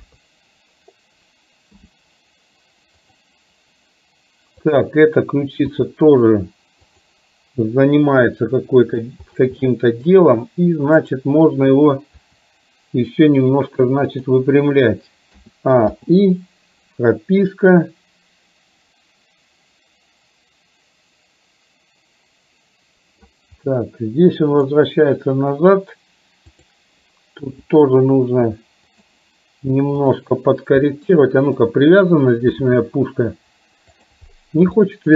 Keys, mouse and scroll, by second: 0.1 KP_3, 1.8 r, 5.8 r, 8.5 middle click, 9.7 middle click, 11.0 click, 12.3 r, 15.5 a, 16.1 i, 18.0-23.5 drag, 23.7-24.7 middle drag, 26.6 click, 27.5 r, 30.0 click, 31.0 middle click, 32.7 g, 34.7-35.1 shift+middle drag.